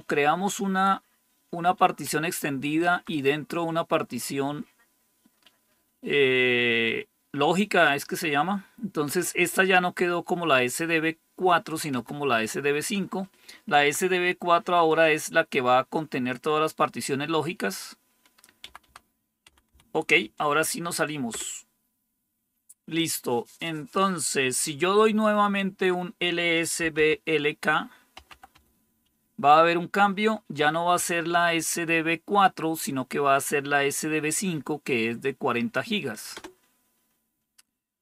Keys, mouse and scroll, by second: 2.0 Up, 2.8 Down, 11.8 Down, 12.2 Up, 13.7 Up, 18.5 Right, 18.7 Right, 19.4 Left, 19.6 Left, 21.2 Return, 26.5-28.9 typing, 36.2 Return.